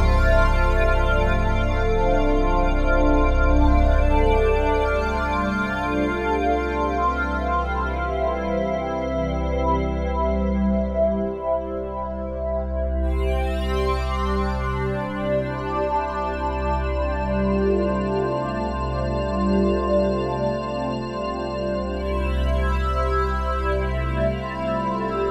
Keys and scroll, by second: 0.8 f.